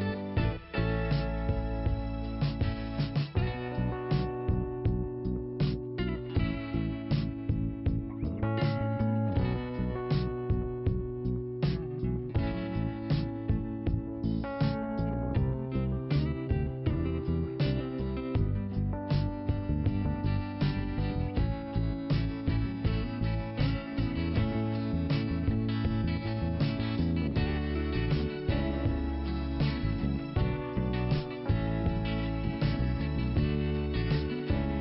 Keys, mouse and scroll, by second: 2.2 click, 2.3 click, 3.9 click, 4.0 click, 5.0 click, 8.5 click, 8.6 click, 10.7 click, 10.8 click, 12.1 click, 14.9 click, 15.0 click, 15.9 click, 16.0 click, 16.3 click, 16.4 click, 16.9 click, 18.3 click, 18.4 click, 19.5 click, 19.6 click, 20.7 click, 20.9 click, 23.8 middle click, 25.9 click.